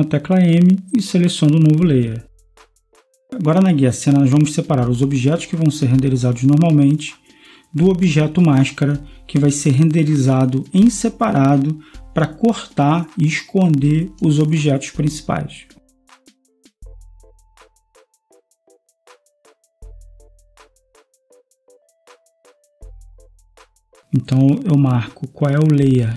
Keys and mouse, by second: 3.0 click, 3.6 Escape, 6.1-7.4 drag, 9.7 F12, 9.7 Escape, 11.1-13.2 drag, 16.0 Escape, 16.8-18.7 drag, 18.7 ctrl+s, 19.5-26.1 drag.